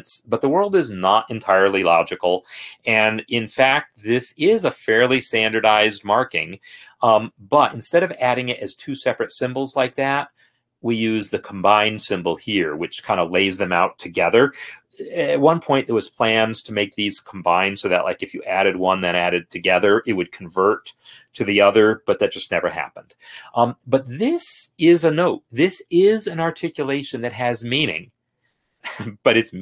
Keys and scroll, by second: 4.4 F8, 5.9 F8, 6.6 F9, 10.0 BackSpace.